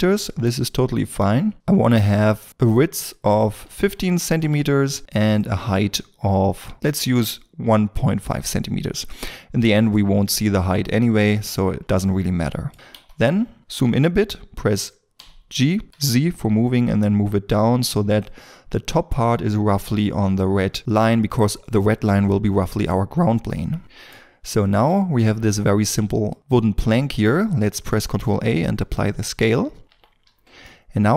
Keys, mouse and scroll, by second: 3.2 KP_1, 3.6 5, 4.2 Return, 6.8 Return, 8.7 scroll up 1, 9.7 middle click, 11.1 scroll down 1, 11.9 middle click, 12.9 KP_1, 13.6 scroll up 1, 15.4 g, 15.8 z, 21.2 shift+middle click, 22.9 scroll down 1, 23.8 middle click, 24.1 scroll down 1, 24.6 shift+middle click, 26.4 shift+middle click, 28.0 ctrl+a, 29.8 n, 30.2 scroll, 30.3 scroll down 1, 30.6 middle click.